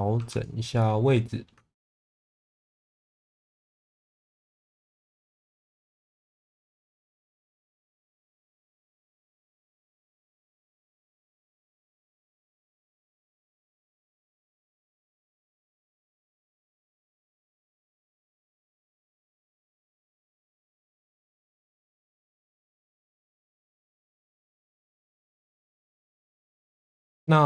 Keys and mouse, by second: 0.2 3, 0.8 middle click, 2.1 click, 4.9 1, 5.2 click, 6.2 click, 7.2 click, 8.2 click, 10.0 click, 10.4 shift+middle click, 11.0 click, 13.2 shift+middle click, 14.3 2, 14.7 shift+middle click, 15.2 middle click, 16.9 2, 18.7 middle click, 19.2 shift+middle click, 19.9 e, 20.2 y, 22.0 click, 22.5 middle click, 23.1 shift+middle click, 23.5 middle click, 24.1 1, 25.2 g, 25.3 b, 26.5 click, 26.9 middle click.